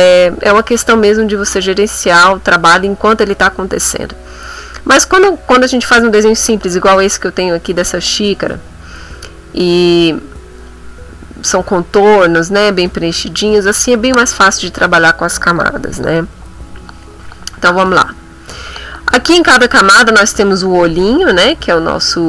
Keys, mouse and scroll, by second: 21.4 click, 21.8 click.